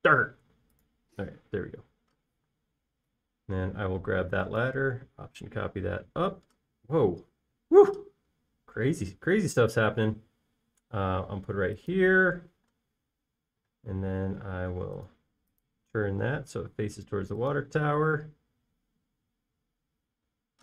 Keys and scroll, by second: 2.5 space, 3.3 m, 5.0 typing, 13.7 q, 20.5 space.